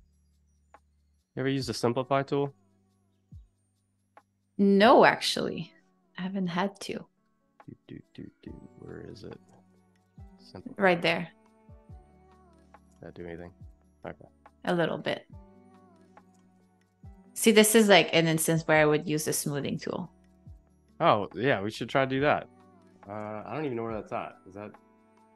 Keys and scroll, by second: 22.2 Escape.